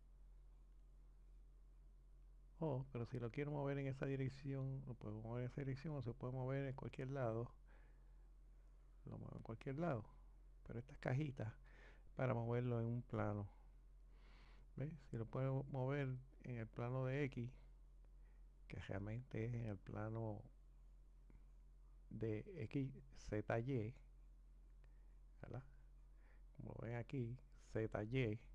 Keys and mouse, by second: 3.6 click, 5.8-6.6 drag, 7.1 click, 16.3 click.